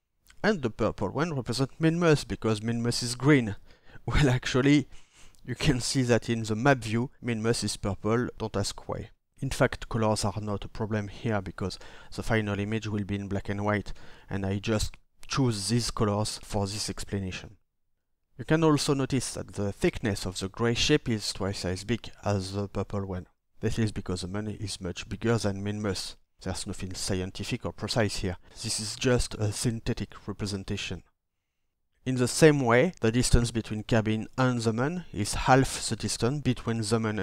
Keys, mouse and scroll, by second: 33.1-36.1 ctrl+middle drag, 33.1-35.6 ctrl+scroll.